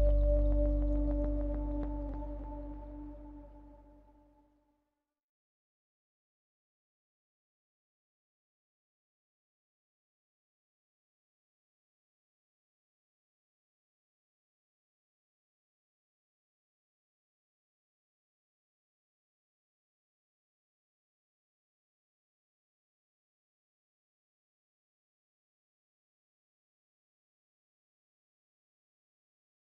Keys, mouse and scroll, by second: 0.6-2.5 scroll down 14, 2.5-8.9 drag, 10.3-11.2 scroll down 4, 12.2 scroll down 4, 13.0 click, 13.8 drag, 16.6 click, 17.5-20.1 scroll down 15, 20.1-22.3 drag, 22.3-22.9 scroll up 6, 23.8 scroll up 6, 23.9 scroll down 1, 24.9 click, 25.5-27.0 scroll down 12, 27.0-29.6 drag.